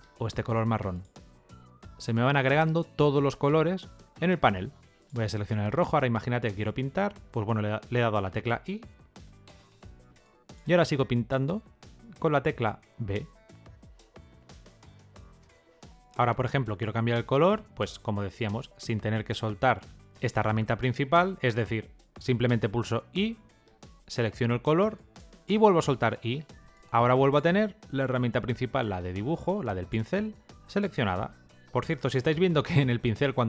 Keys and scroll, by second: 8.4 i, 12.7 b, 23.0 i, 26.0 i.